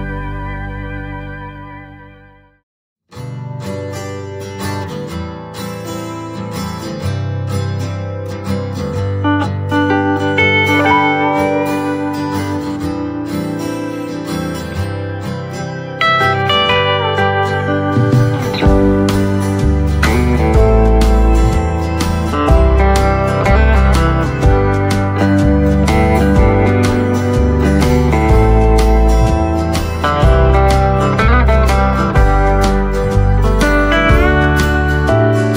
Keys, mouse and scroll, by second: 2.8 right click, 3.5-3.9 scroll up 1, 3.9 right click, 5.0-8.6 drag, 14.8 click, 17.3 scroll up 1, 17.3 typing, 19.2 click, 19.5 right click, 21.8 click, 23.5 right click, 23.5 typing, 24.2 scroll up 1, 24.4 right click, 25.2 click, 28.3 right click, 29.0 click, 29.3 right click, 32.2 typing, 32.2 click, 32.6 right click, 33.5-35.2 scroll up 1.